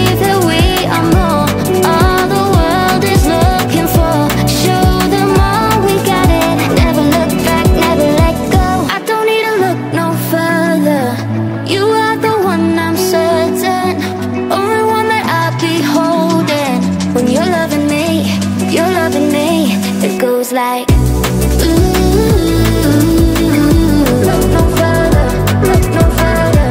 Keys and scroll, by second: 7.1 ctrl+2, 9.4 Delete, 10.6 space, 14.9 space, 17.8 Right, 21.0 space.